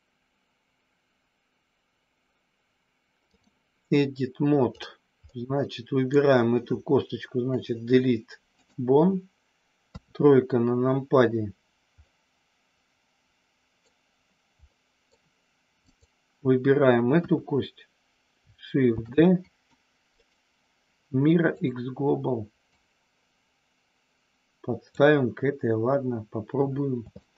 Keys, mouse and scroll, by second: 5.3 middle click, 7.4 Delete, 9.8 KP_3, 12.0-13.8 middle drag, 14.7 middle click, 15.8 click, 17.1 KP_1, 18.9 shift+d, 19.4 click, 20.1-21.7 right drag, 22.7-24.9 drag, 27.1 shift+middle click.